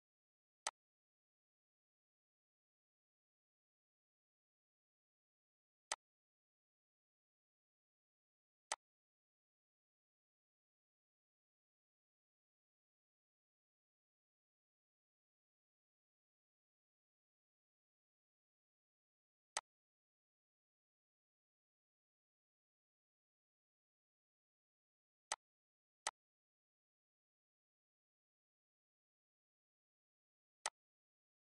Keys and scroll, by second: 27.4 ctrl+s.